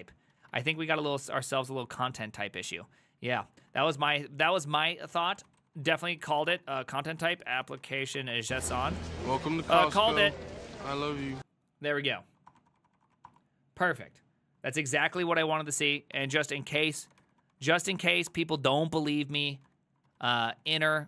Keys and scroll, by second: 0.4 ctrl+a, 0.5 2, 0.8 Up, 1.3 ctrl+Left, 2.0 ctrl+Left, 2.0-2.6 ctrl+Left, 2.8-5.2 ctrl+Right, 3.4 Right, 3.6-10.1 typing, 12.4 Up, 12.5 Return, 12.6 Up, 12.7 Return, 12.8 Up, 12.9 Return, 13.1 Up, 13.1 Return, 13.2 Up, 13.3 Return, 15.2 Up, 15.3-21.0 typing.